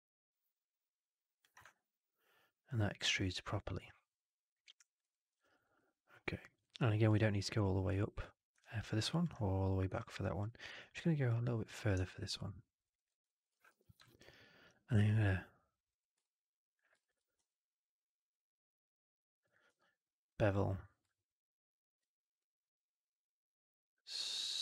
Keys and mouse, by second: 1.6-2.8 alt+drag, 2.9 alt+right click, 3.1-4.9 alt+drag, 5.0 alt+middle click, 5.3 alt+right click, 5.4 alt+right click, 5.7 alt+click, 6.5 alt+right click, 6.7 alt+click, 8.5 alt+click, 9.9 alt+click, 10.7 alt+click, 11.2 click, 12.0 alt+click, 12.9 alt+middle click, 13.0 alt+right click, 13.2 alt+click, 13.6 4, 13.9 alt+drag, 14.1 alt+right click, 14.3 alt+drag, 14.8 q, 16.1-16.7 alt+drag, 17.3 q, 19.4 click.